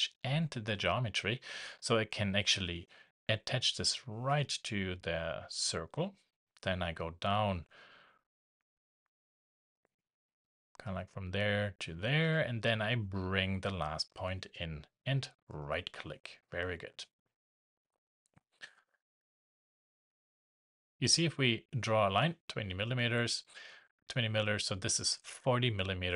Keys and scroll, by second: 22.9 shift+Escape.